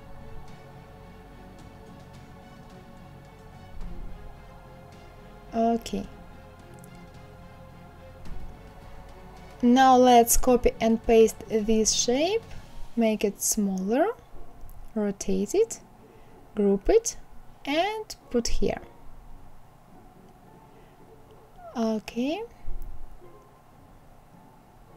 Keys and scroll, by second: 0.2 Escape, 1.4 Escape, 2.9 Escape, 3.5 Escape, 4.3 Escape, 4.7 Escape, 5.3 Escape, 5.8 Escape, 9.0 ctrl+c, 9.4 ctrl+v.